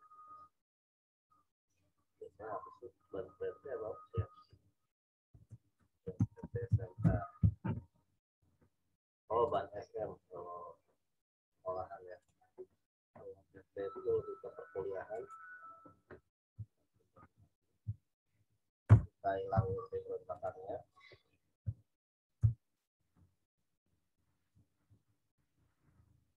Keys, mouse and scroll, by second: 0.7 click, 4.2-7.1 typing, 10.9 right click, 12.2 click, 15.1 click, 16.9 ctrl+v, 18.3 ctrl+t, 18.8 Return, 19.5 w, 20.3 click, 22.4 m, 22.5 click, 23.1 v, 23.4 click, 24.8 ctrl+t, 25.7 alt+shift+click.